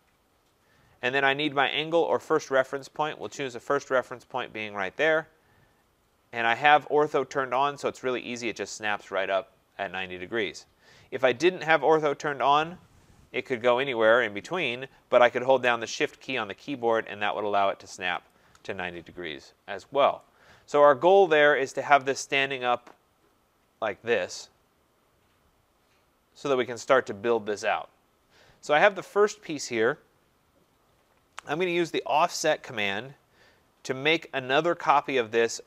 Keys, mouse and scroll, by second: 2.8 right click, 5.2 click, 7.6 right click, 12.5 click, 18.3 shift+click, 26.5-31.6 right drag, 35.0 click.